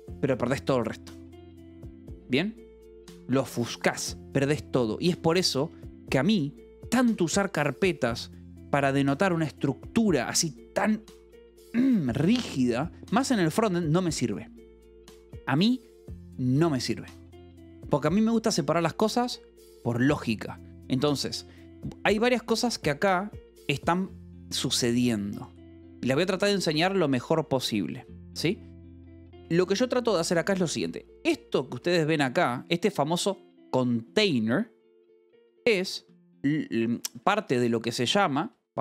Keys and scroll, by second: 13.6 Escape, 21.4 j, 23.0-26.3 typing, 31.0 j, 32.3 shift+v, 36.0 Escape, 36.9-38.8 typing.